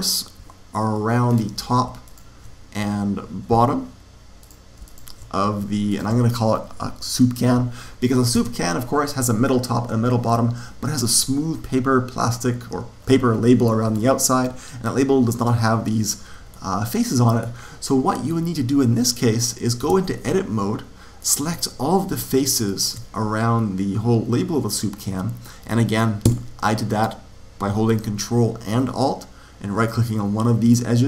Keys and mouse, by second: 1.2 click, 2.0 right click, 4.3-7.7 right drag, 8.3 Tab, 16.4-19.8 middle drag, 19.8 Tab, 21.1 click, 22.7 right click, 23.1 right click, 23.3-24.4 middle drag, 26.2 a.